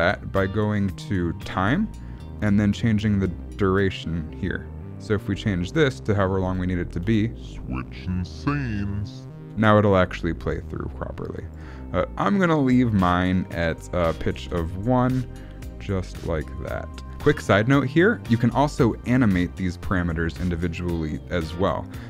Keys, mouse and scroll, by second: 0.4 click, 1.4 click, 2.2-3.0 scroll down 1, 3.0 click, 6.4 click, 7.0 space, 9.5 space, 11.3 click, 13.7 click, 15.0 click, 16.1 click.